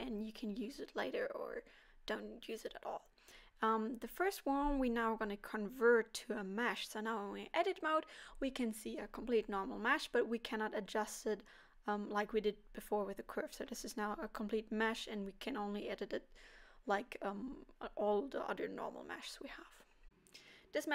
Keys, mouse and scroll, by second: 0.3 click, 0.8 click, 6.2 middle click, 6.8 Tab, 7.2 middle click, 11.1-11.7 scroll up 1, 11.7 scroll down 1, 11.8 middle click, 13.5 middle click.